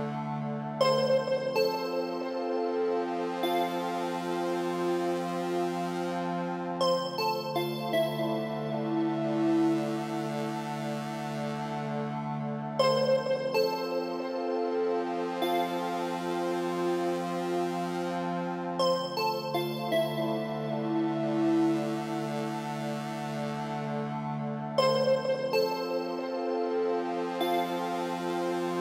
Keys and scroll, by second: 0.2 ctrl+a, 17.7 Down, 27.9 Return.